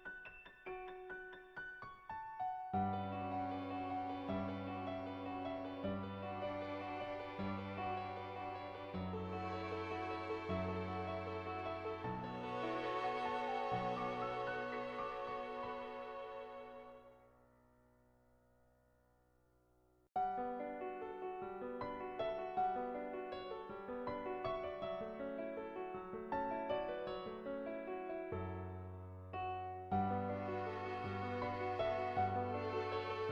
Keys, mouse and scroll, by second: 0.0 ctrl+z, 0.2 click, 0.5 click, 1.3 [, 1.5 [, 1.9 click, 2.3 click, 3.0 ctrl+z, 3.1 ctrl+z, 3.6 ctrl+z, 3.9 click, 6.1 click, 6.8 click, 7.9 ctrl+z, 8.3 click, 8.9 click, 9.9 ], 10.0 ], 10.2 click, 18.0 [, 18.3 click, 18.3 [, 19.0 ctrl+z, 19.3 click, 20.1 click, 21.0 ], 21.5 click, 23.6 click, 25.0 click, 26.5 click, 27.6 ctrl+z, 28.0 click, 29.2 click, 29.9 click, 32.9 click.